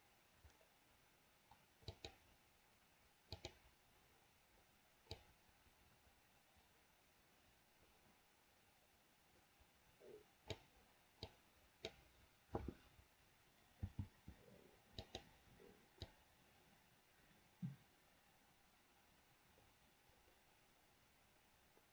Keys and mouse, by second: 1.9 click, 3.4 click, 5.4-10.8 drag, 11.5 click, 16.3-21.9 drag, 18.6-21.9 right drag.